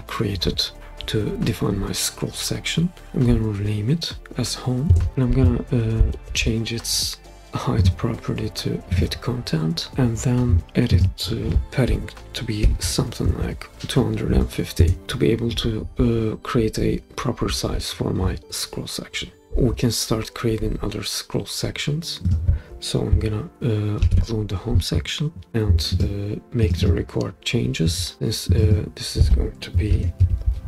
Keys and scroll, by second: 3.1 Home, 4.8 Return, 11.9-13.3 typing, 14.8 Return, 24.0 super+d, 29.6-30.6 typing.